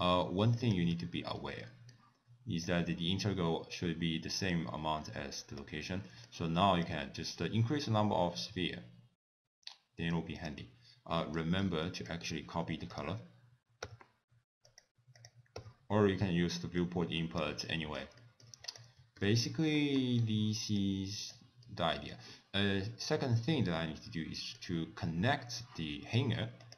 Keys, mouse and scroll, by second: 0.6 click, 0.9 x, 1.3 scroll down 1, 1.6 middle click, 2.6 click, 5.0 middle click, 5.6 click, 6.1 middle click, 6.9 click, 10.4 click, 11.2 middle click, 11.6-12.6 scroll down 6, 11.9 middle click, 12.9 shift+click, 13.9 n, 14.6 click, 15.6 n, 16.8 click, 17.6 middle click, 18.2 middle click, 18.6 click, 19.2 ctrl+s, 19.7 middle click, 20.1-20.8 scroll up 1, 20.8 click, 20.8 scroll up 3, 21.6 middle click, 22.7 middle click, 25.9 middle click, 26.6 click.